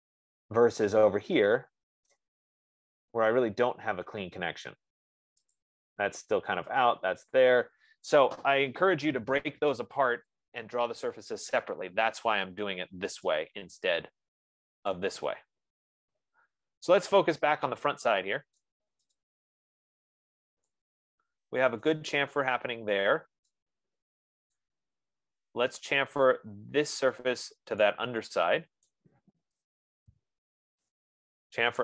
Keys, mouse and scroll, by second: 2.5 right click, 3.0 middle click, 3.2 middle click, 4.0 middle click, 4.2 middle click, 4.6-5.8 scroll, 5.9 click, 7.3 click, 9.9-10.9 scroll, 12.0 right click, 15.3 right click, 19.3 right click, 20.1 click, 20.3-20.8 scroll, 21.4 F15, 22.4 right click, 22.7 scroll, 25.0 right click, 25.4 middle click, 25.5 middle click, 29.2 right click, 29.8-31.3 typing.